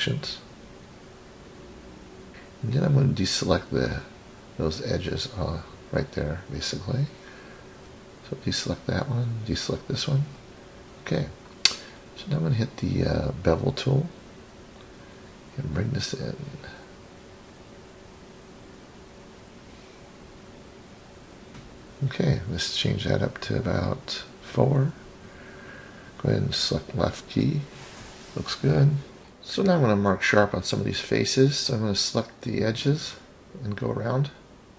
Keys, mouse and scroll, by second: 0.7-1.0 ctrl+drag, 1.3-2.5 scroll down 8, 2.1 middle click, 2.3 ctrl+z, 2.3 scroll up 10, 3.0 scroll down 2, 3.7-4.7 scroll down 2, 4.8 ctrl+click, 6.1 ctrl+click, 7.0-7.9 scroll up 2, 8.1-9.1 middle drag, 9.6 ctrl+click, 10.8 ctrl+click, 12.2 scroll up 1, 14.1 scroll down 3, 14.7-16.2 middle drag, 17.5 click, 18.7-20.3 drag, 20.7-21.4 scroll up 5, 21.6-23.4 middle drag, 23.6-23.9 scroll down 3, 25.5 click, 25.8 click, 26.2 click, 27.9 click, 28.2-29.2 scroll down 3, 29.2 scroll down 1, 29.3-29.9 middle drag, 30.3 scroll up 3, 31.0 click, 31.2 click, 34.0 click.